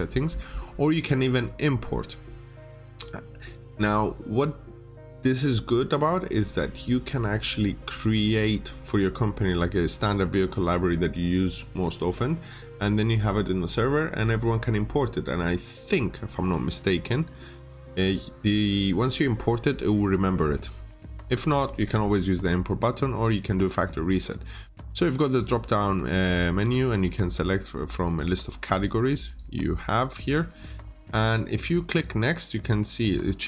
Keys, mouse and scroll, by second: 24.1 click.